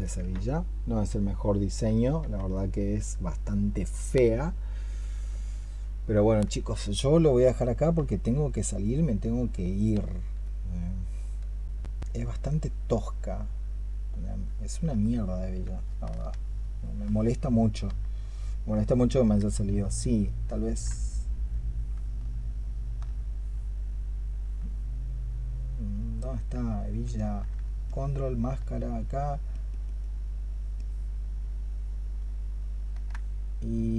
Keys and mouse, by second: 6.7 alt+click, 14.5 alt+click, 22.5 alt+click, 27.0 alt+click, 27.7 ctrl+click, 29.4 ctrl+click, 31.5 ctrl+click, 32.0 ctrl+click.